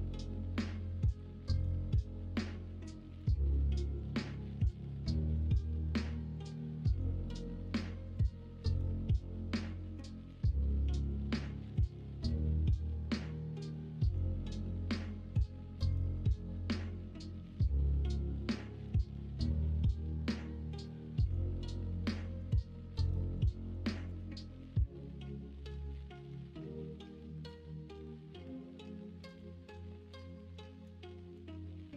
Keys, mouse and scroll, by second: 0.0 middle click, 1.1 2, 4.0 click, 5.6 middle click, 6.6 middle click, 7.4 middle click, 8.3 middle click, 12.0 middle click, 12.5 ctrl+b, 17.7 middle click, 18.8 k, 24.7 k, 28.3 k.